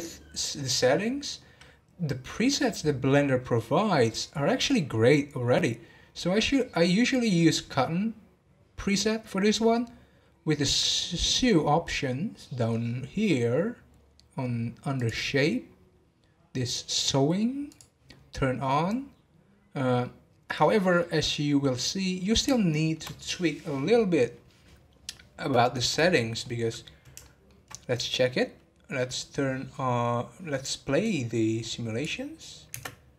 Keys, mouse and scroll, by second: 12.0-12.4 scroll down 2, 12.5 scroll down 8, 13.2 scroll down 4, 14.9-15.4 drag, 15.4 scroll down 2, 17.7-20.1 drag, 20.1-23.0 middle drag, 23.0 scroll down 1, 26.4-28.0 middle drag, 28.0-28.4 scroll down 2, 28.9 scroll up 1.